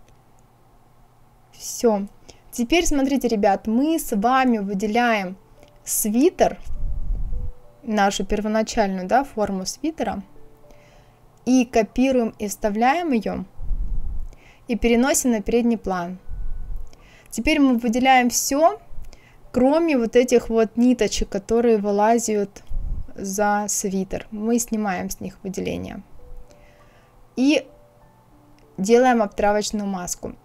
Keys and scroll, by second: 12.3 ctrl+c, 13.3 ctrl+f.